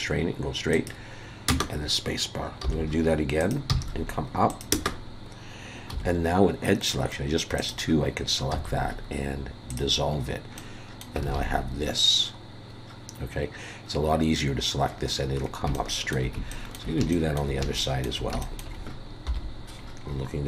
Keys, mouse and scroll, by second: 2.6 k, 5.9 2, 7.6 click, 8.5 x, 10.1 scroll down 2, 10.6 middle click, 11.3 alt+a, 14.9-15.7 scroll down 8, 15.7 shift+middle click, 16.5 shift+middle click, 17.1 shift+middle click, 17.8 shift+middle click, 18.4 shift+middle click, 19.2 KP_7, 20.0-20.4 scroll up 6.